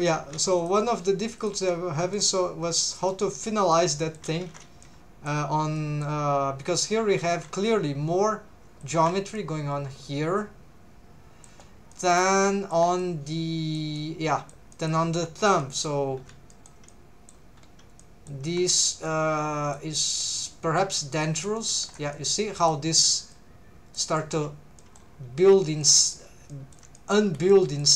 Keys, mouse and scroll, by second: 0.2 alt+a, 0.6 alt+shift+click, 1.4 alt+shift+click, 2.2 middle click, 3.1 middle click, 3.7 middle click, 4.4 alt+a, 4.8 middle click, 5.8 middle click, 8.8 alt+shift+click, 9.4-11.5 middle drag, 11.9 middle click, 13.0 middle click, 14.0 middle click, 15.6 middle click, 16.1 scroll down 1, 16.5 shift+middle click, 16.9 middle click, 17.6 scroll up 2, 18.0 middle click, 19.0 middle click, 20.1 middle click, 21.2 middle click, 21.7 2, 21.9 click, 22.1 middle click, 23.3 click, 24.2 middle click, 24.8 middle click, 25.8 shift+middle click, 26.5 scroll up 1, 26.5 middle click, 27.0 shift+middle click, 27.3 scroll up 2, 27.5 middle click.